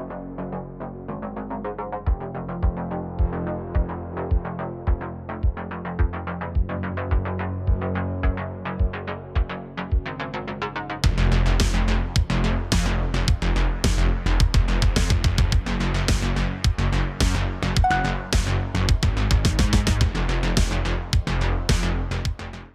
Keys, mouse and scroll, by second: 0.9 click, 2.4-6.5 drag, 7.2-10.2 drag, 10.2 space, 10.6 middle click, 10.9-11.7 scroll up 5, 11.2 shift+middle click, 12.2-15.2 drag, 16.1 scroll down 3, 16.4 space, 16.9 click, 17.1 scroll down 2, 17.3-19.5 middle drag, 19.5 click, 19.8 scroll down 2, 20.0-22.7 middle drag.